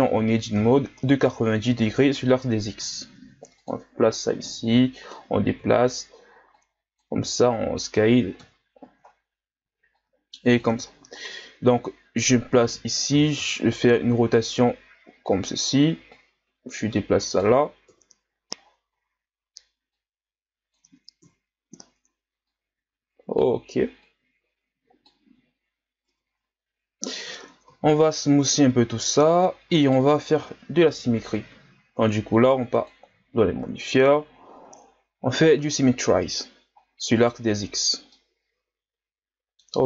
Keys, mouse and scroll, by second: 0.1 r, 2.8 s, 4.5-5.6 drag, 5.6 KP_3, 6.5 click, 7.2 s, 8.4 KP_1, 9.1-9.9 scroll up 2, 9.9 click, 10.8-11.9 scroll up 2, 11.9-13.1 drag, 13.1 r, 16.1-17.9 drag, 17.9 KP_3, 18.6-19.9 scroll down 10, 19.9-21.2 drag, 21.2 KP_1, 22.4-26.1 drag, 26.1 Tab, 26.4-27.1 scroll down 2, 27.1-27.7 scroll up 1, 27.7 w, 28.7 a, 29.0-29.5 scroll down 1, 29.5-29.8 scroll up 3, 29.8-31.2 right drag, 32.9 click, 33.5 a, 33.9-34.6 scroll down 1, 34.6-35.3 scroll down 4, 35.3-36.4 scroll up 5, 36.4-36.8 scroll down 1, 36.8-37.1 scroll up 1, 37.1-37.6 right drag, 37.6 Tab, 38.1-39.8 middle drag.